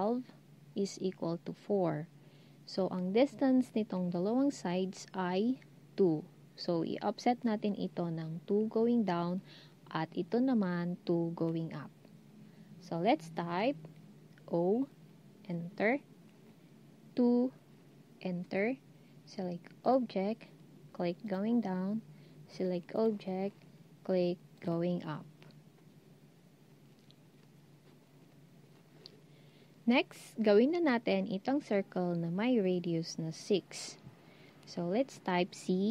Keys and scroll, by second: 14.5 o, 17.0 2, 35.6 c.